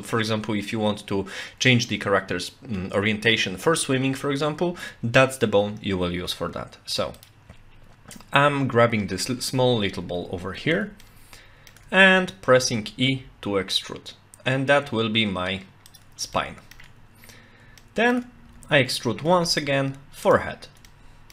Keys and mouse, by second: 7.2 click, 11.1 shift+middle click, 12.5 e, 13.1 z, 15.9 click, 16.3 shift+middle click, 17.8 shift+middle click, 18.5 e, 19.3 z, 20.3 click, 20.9 shift+middle click.